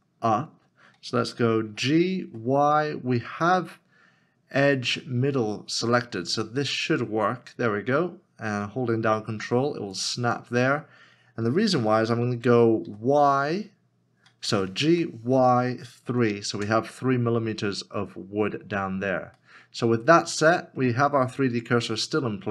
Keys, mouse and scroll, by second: 1.7 middle click, 2.2 y, 10.0 ctrl+click, 12.8 y, 16.6 Return, 19.4 middle click.